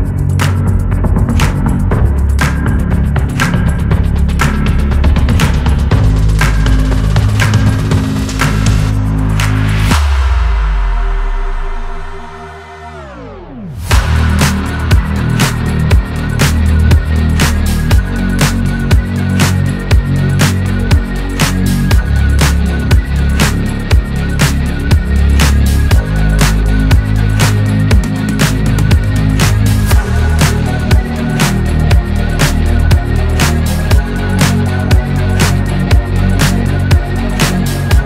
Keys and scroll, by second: 0.1 ctrl+v, 4.6 ctrl+d, 7.1 ctrl+d, 36.5-38.0 Left.